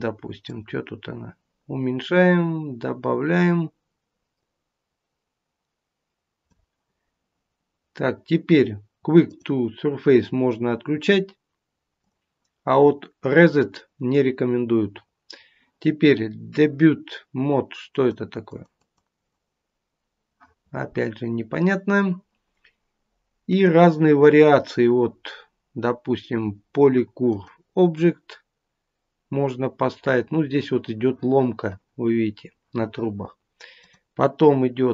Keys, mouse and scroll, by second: 0.4 click, 9.4 click, 12.2 click, 17.9 click, 18.4 click, 18.8 click, 30.4-32.8 scroll up 2, 32.8-33.6 scroll up 3, 34.2 click.